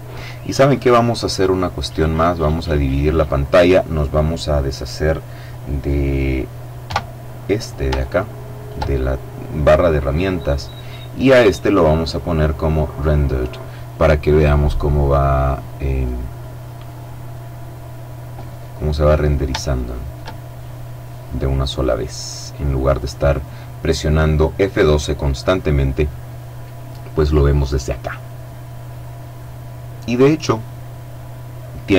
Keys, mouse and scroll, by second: 1.2-3.1 drag, 6.0 t, 7.1-8.4 shift+middle drag, 11.2 click, 12.2 click, 12.8-15.7 middle drag, 15.8 right click, 17.5 scroll up 2, 18.0-18.5 scroll down 2, 19.0-20.7 shift+middle drag, 20.8-22.6 middle drag.